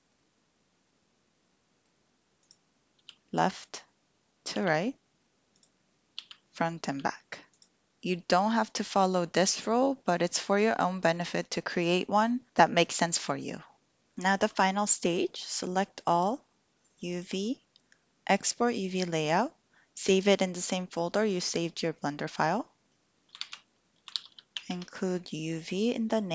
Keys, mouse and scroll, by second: 0.1-1.9 drag, 3.0 l, 6.2 l, 7.5 click, 14.9-16.2 drag, 17.0-26.3 drag.